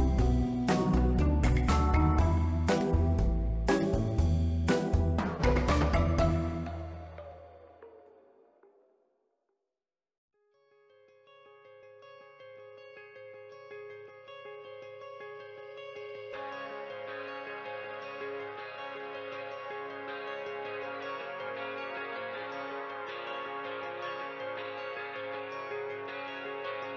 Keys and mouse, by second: 0.2-1.1 middle drag, 1.3 ctrl+middle click, 1.7 middle click, 2.5 middle click, 2.8 Tab, 3.4 2, 3.5 click, 3.9 shift+middle click, 5.2 e, 5.4 z, 6.5 click, 6.7 ctrl+middle click, 7.5-8.6 drag, 8.7 Tab, 9.0 ctrl+middle click, 13.2-14.7 drag, 17.4 click, 17.7 click, 18.0 click, 18.4 click, 19.0-20.0 drag, 20.9-21.3 drag, 21.6-22.1 middle drag, 22.8 y, 24.2 click, 24.9-25.6 middle drag, 26.5 ctrl+middle click.